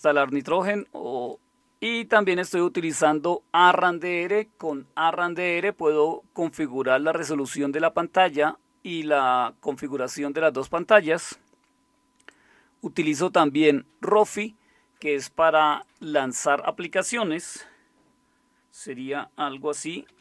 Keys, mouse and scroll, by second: 20.1 alt+super+d.